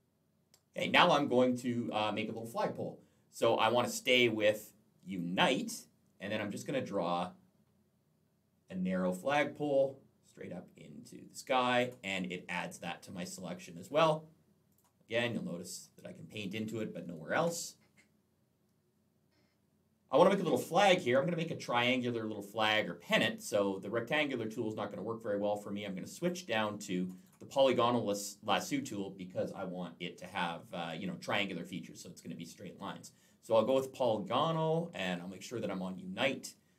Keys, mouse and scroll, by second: 4.9 click, 6.5 click, 14.6 click, 15.3 click, 17.2 ctrl+z, 26.0 click, 27.0 right click, 33.4 click.